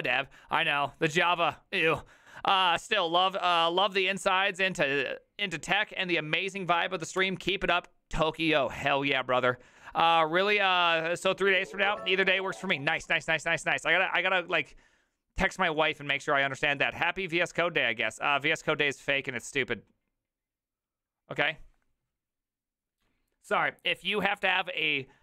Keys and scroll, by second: 7.2 alt+f.